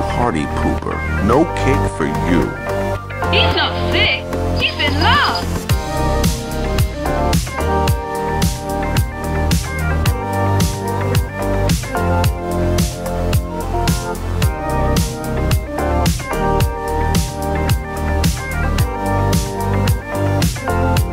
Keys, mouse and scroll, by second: 0.0 click, 0.9-2.7 drag, 1.5 typing, 2.9 Tab, 3.7-4.3 drag, 4.9 click, 5.7 click, 6.0-11.0 drag, 11.5-12.8 middle drag, 13.5 click, 15.4 r, 19.2 click, 19.6-20.7 middle drag.